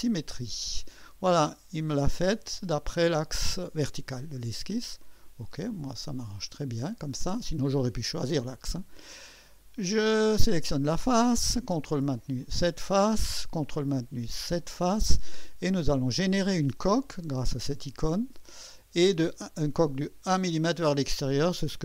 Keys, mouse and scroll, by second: 5.0 click, 6.3-6.9 drag, 10.1 click, 12.4 click, 13.0 click, 14.6 click, 17.8 click, 20.8 click.